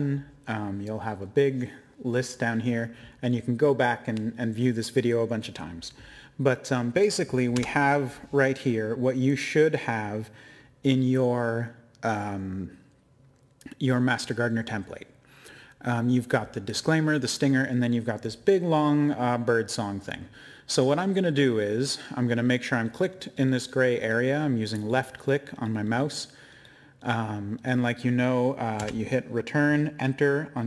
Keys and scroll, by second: 7.5 Return, 28.8 Return.